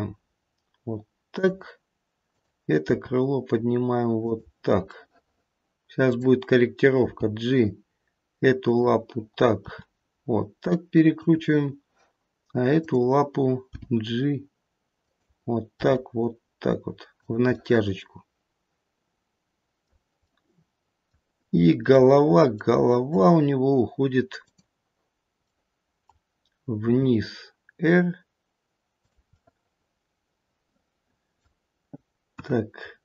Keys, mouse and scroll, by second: 2.3 click, 3.1 g, 4.8 middle click, 5.5-6.0 scroll up 2, 6.0 click, 7.0 g, 9.6 r, 12.7 click, 13.7 g, 15.7 r, 17.5 middle click, 18.1 middle click, 20.2 middle click, 22.7 middle click, 24.4 click, 25.3 middle click, 26.8 r, 29.3 middle click, 32.3 KP_1, 32.8-33.0 scroll up 1.